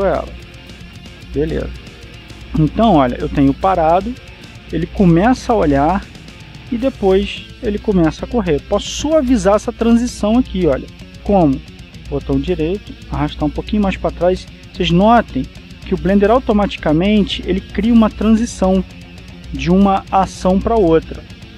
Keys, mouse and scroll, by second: 1.4 click, 3.6-12.6 drag, 12.7 right click, 13.7 g, 14.5 click, 16.1-17.0 scroll up 1, 19.0-21.5 drag.